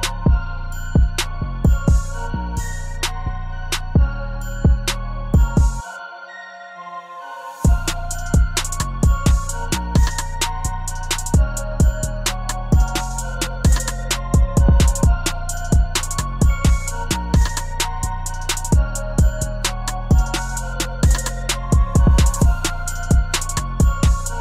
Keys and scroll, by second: 12.3 ctrl+z.